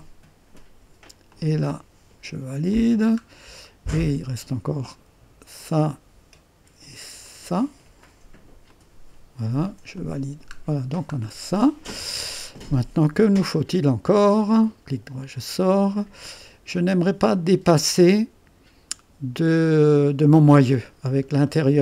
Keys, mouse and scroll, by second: 1.3 click, 2.7 click, 3.2-3.6 scroll up 2, 4.0 right click, 5.6 click, 7.2-9.4 drag, 9.9 click, 10.5-11.4 scroll down 1, 11.4-11.9 scroll down 1, 11.9 right click, 14.5 right click, 16.9-20.1 drag, 21.0 scroll up 2, 21.5 right click.